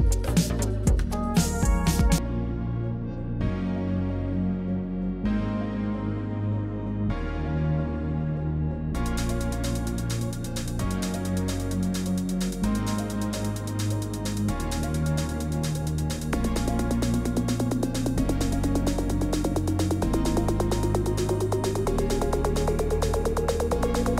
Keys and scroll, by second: 0.4 ctrl+v, 2.5 ctrl+d, 2.6 shift+Right, 2.8 shift+Right, 3.4 shift+Left, 3.6 Right, 3.8 Right, 19.3 ctrl+v, 22.2 BackSpace, 23.6 BackSpace.